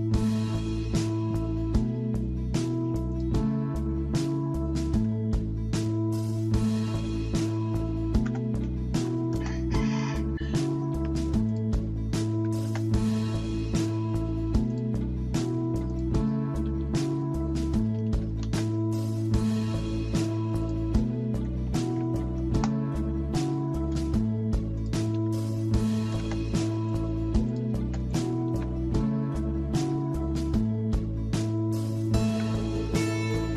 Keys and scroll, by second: 5.0 alt+Tab, 6.8 alt+Tab, 8.0-9.2 typing, 9.3 Return, 10.9 Escape, 12.0-13.1 typing, 16.7 Escape, 16.7-18.4 typing, 21.4-22.2 typing, 22.6 Return, 25.2 Escape, 25.8-28.2 typing, 28.5 Escape, 29.8 alt+Tab, 32.3 alt+Tab.